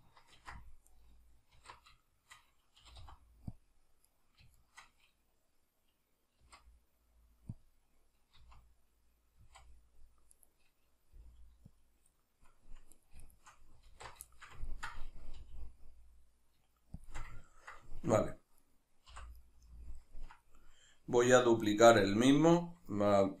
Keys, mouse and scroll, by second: 0.4 ctrl+r, 1.1 right click, 1.6 alt+q, 2.1-3.6 shift+middle drag, 2.8 g, 3.6 click, 4.1 right click, 4.6 shift+right click, 6.4 g, 7.7 click, 8.4 z, 10.3 right click, 11.1 g, 11.8 click, 12.2-12.9 middle drag, 12.9 right click, 13.3 shift+right drag, 13.9 alt+q, 14.3-17.1 shift+middle drag, 15.4 g, 17.1 shift+click, 17.4-18.6 ctrl+middle drag, 18.6 right click, 19.1 l, 19.5-23.4 middle drag.